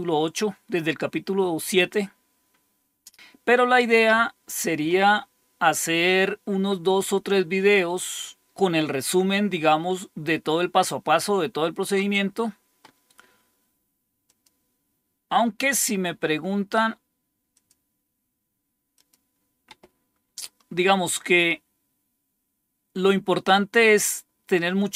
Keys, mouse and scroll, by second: 14.2 click, 17.5 click, 18.9 click, 21.2-22.0 scroll down 1, 22.2-22.9 scroll down 2.